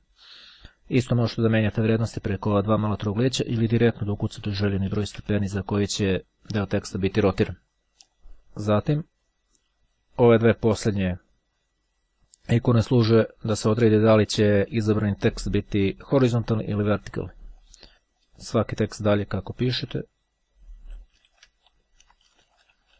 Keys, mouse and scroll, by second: 1.2-3.5 drag, 4.4 KP_1, 4.8 KP_0, 4.9 KP_Enter, 7.0 click, 8.2 click, 9.0 click, 17.7 click, 17.9-18.4 ctrl+scroll down 1, 18.6 Right, 19.2 Left, 19.5 Down, 21.6-22.9 typing.